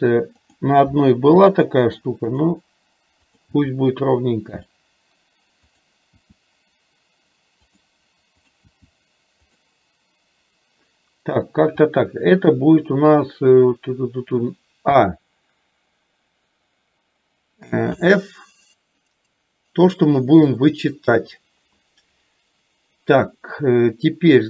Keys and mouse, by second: 0.7 click, 1.6 g, 3.3 click, 3.6 g, 8.6 click, 18.1 f, 19.2-20.9 middle drag.